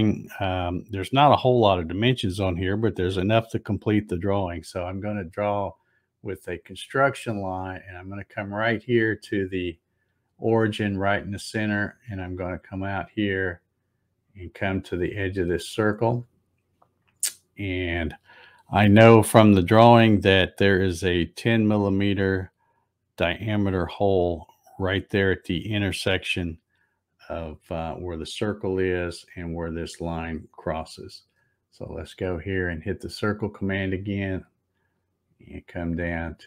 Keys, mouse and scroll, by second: 6.9 click, 11.4-15.7 drag, 32.9 click.